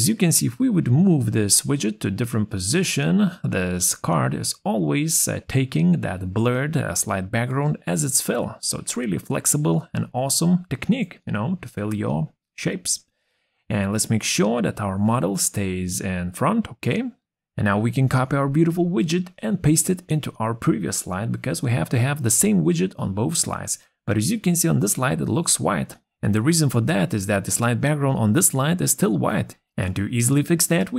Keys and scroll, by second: 17.4 ctrl+c, 28.1 ctrl+z.